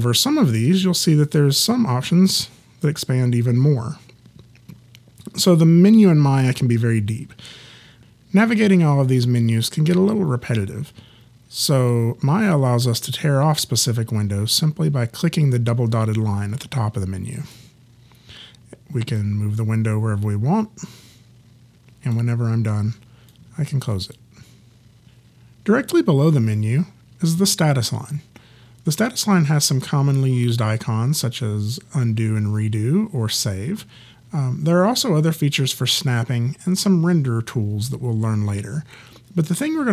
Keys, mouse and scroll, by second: 17.4 click, 23.3 click.